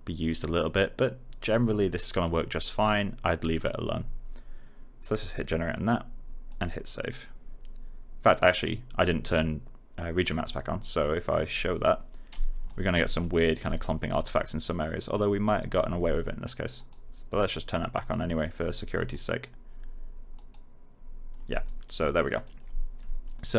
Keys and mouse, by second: 5.0 click, 10.3 click, 12.6 click, 13.0 middle click, 13.3 right click, 13.6 click, 21.6 alt+right click, 22.0-23.5 alt+drag.